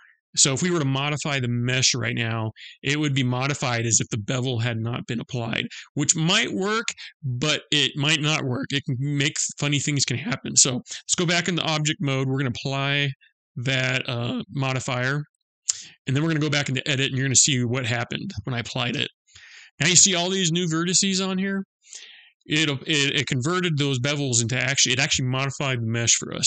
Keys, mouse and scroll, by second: 10.7 Tab, 12.7 click, 15.8 click, 16.3 middle click, 18.3 Tab.